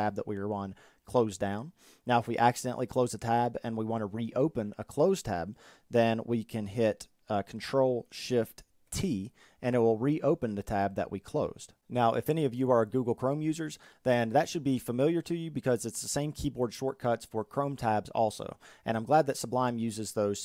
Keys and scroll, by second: 7.4 ctrl+shift+t.